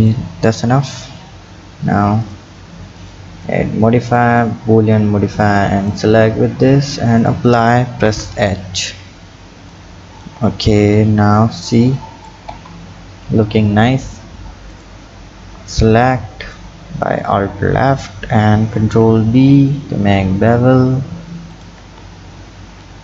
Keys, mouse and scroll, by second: 0.9 click, 2.2 click, 3.0 click, 3.4-5.4 drag, 6.6-7.3 drag, 8.1 h, 8.8 click, 9.7 click, 10.7 scroll up 3, 11.8 click, 12.5 Tab, 14.7 alt+click, 16.5 click, 18.9 ctrl+b, 21.8 Tab.